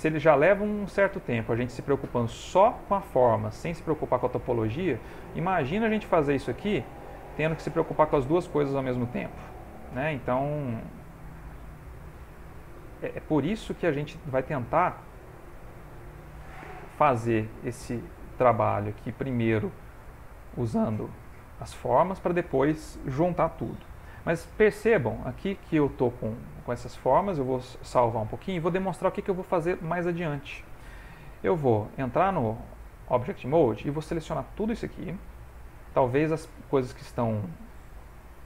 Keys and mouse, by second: 1.4 middle click, 2.5 shift+click, 3.3 click, 4.9 middle click, 6.6 middle click, 7.3 alt+click, 8.5 middle click, 8.5 typing, 10.2 shift+click, 10.9 click, 11.5 middle click, 12.6 click, 14.3 middle click, 15.0 middle click, 16.0 ctrl+middle click, 16.1 ctrl+middle click, 16.2 middle click, 17.1 ctrl+middle click, 17.4 middle click, 18.8 ctrl+middle click, 19.4 middle click, 20.4 middle click, 20.7 ctrl+middle click, 20.7 ctrl+middle click, 21.2 ctrl+middle click, 21.7 middle click, 25.3 middle click, 27.5 middle click, 27.8 ctrl+s, 29.9 middle click, 31.9 middle click, 32.0 ctrl+Tab, 33.8 click, 35.3 middle click, 36.3 middle click.